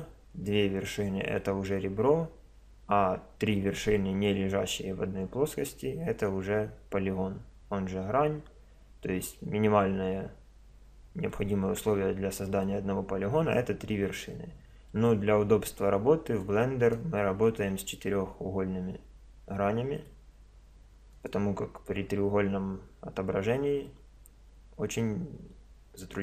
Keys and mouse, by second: 15.0-16.5 middle drag, 17.4-21.2 middle drag, 21.2-22.9 drag, 24.0-25.8 middle drag.